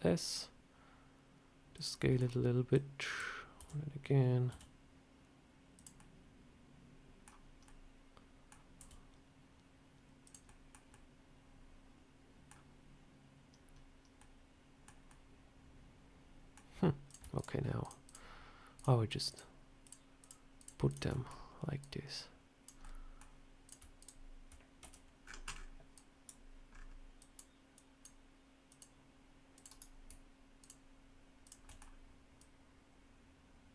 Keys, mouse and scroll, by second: 1.9 middle click, 2.6 click, 3.5 d, 4.4 s, 5.9 middle click, 7.5 middle click, 8.7 s, 10.4 middle click, 10.8 middle click, 14.1 middle click, 15.0 middle click, 17.0 click, 17.3-20.0 shift+click, 21.0 shift+click, 21.0 middle click, 21.7 click, 22.7 middle click, 23.6 click, 23.9 click, 24.7 c, 30.5 shift+click, 31.5 shift+click, 31.6 middle click, 32.3 click.